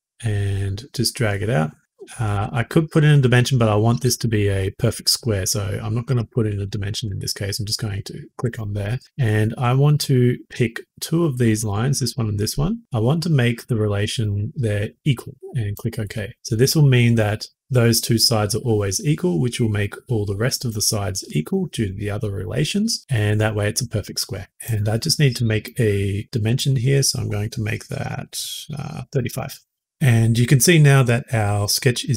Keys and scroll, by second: 8.3 Escape, 24.5 s, 28.9 typing, 29.2 Return, 29.8 Escape.